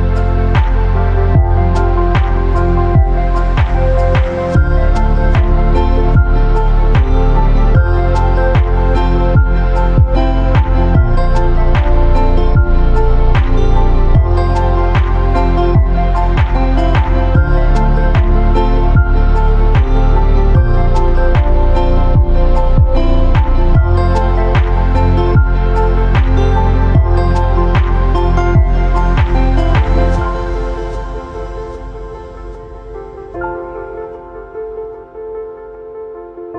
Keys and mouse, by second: 0.6 Tab, 1.3 KP_Divide, 2.2 h, 2.6 shift+click, 3.2 shift+click, 3.6 Tab, 4.1 2, 6.5 click, 6.7 alt+click, 9.5 alt+shift+click, 9.9 x, 11.0 shift+middle click, 12.2 click, 12.4 alt+click, 13.2 alt+click, 13.9 alt+shift+click, 14.1 x, 14.6 shift+middle click, 15.3 ctrl+z, 16.0 shift+middle click, 16.1 a, 17.1 alt+click, 18.4 alt+shift+click, 19.0 alt+shift+click, 19.6 alt+shift+click, 20.2 alt+shift+click, 20.8 alt+shift+click, 21.6 middle click, 22.7 KP_Decimal, 23.7 middle click, 24.1 shift+middle click, 25.0 alt+shift+click, 25.6 alt+shift+click, 26.2 alt+shift+click, 26.7 alt+shift+click, 27.2 alt+shift+click, 28.0 alt+shift+click, 28.5 alt+shift+click, 29.0 middle click, 30.1 alt+shift+click, 30.5 shift+middle click, 31.8 alt+shift+click, 32.3 alt+shift+click, 32.8 alt+shift+click, 33.7 alt+shift+click, 34.2 alt+shift+click, 34.9 alt+shift+click, 35.2-36.4 middle drag, 36.4 alt+shift+click.